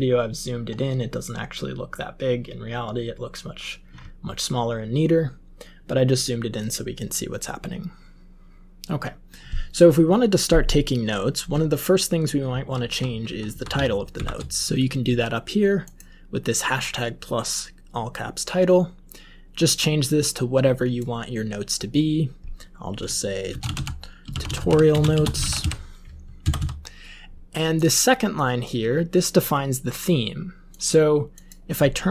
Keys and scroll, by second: 12.4 Up, 12.8 Up, 13.0 Up, 13.2 Up, 13.4 Up, 14.1 shift+End, 23.2-26.0 typing, 26.4 Down, 26.5 Down.